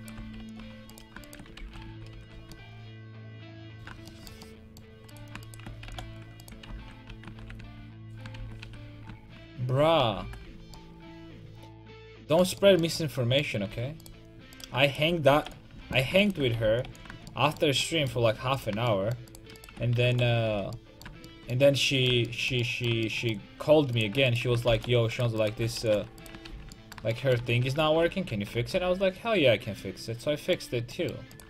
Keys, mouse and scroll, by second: 0.4 alt+m, 1.6 ctrl+x, 1.9 a, 2.2 ctrl+t, 2.3 a, 5.1 right click, 5.9 alt+m, 6.8 ctrl+x, 7.1 a, 7.4 ctrl+t, 7.6 a, 8.4 ctrl+x, 8.6 a, 9.8 a, 10.0 a, 10.3 ctrl+t, 10.6 ctrl+a, 13.7 a, 14.1-15.8 right drag, 15.4 alt+m, 15.8 a, 16.6 alt+m, 17.5-19.8 middle drag, 20.1 alt+m, 20.5 a, 24.0-26.5 right drag, 24.7 alt+m, 25.8 alt+m, 26.5 ctrl+x, 27.4 a, 27.6 a, 28.0 ctrl+t, 28.3 a, 28.6 ctrl+t, 28.9 a, 29.8 middle click, 30.3 middle click, 30.9 click, 31.3-31.4 right drag.